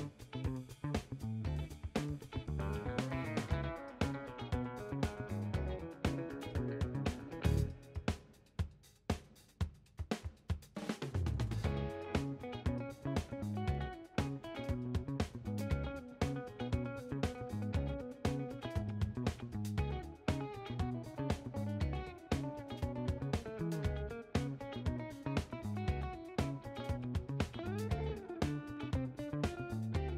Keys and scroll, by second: 7.8 w, 10.9 ctrl+a, 23.3 ctrl+z.